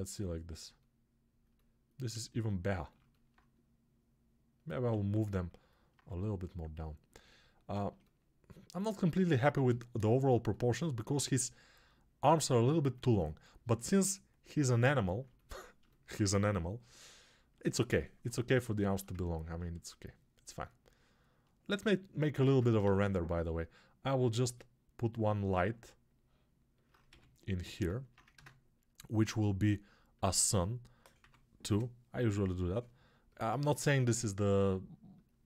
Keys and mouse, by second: 2.1 ctrl+z, 4.9 alt+q, 5.5-27.7 alt+drag, 22.3 ctrl+Tab, 22.7 shift+a, 27.0 g, 27.7-32.4 alt+middle drag, 28.3 ctrl+space, 32.4-35.4 alt+drag.